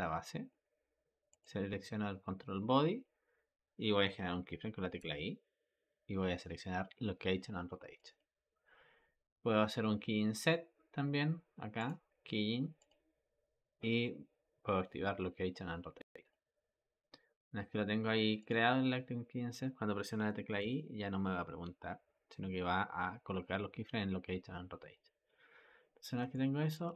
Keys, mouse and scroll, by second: 1.2 click, 11.7-14.8 drag, 18.3-20.5 drag, 20.5 i, 26.2-26.9 ctrl+middle drag.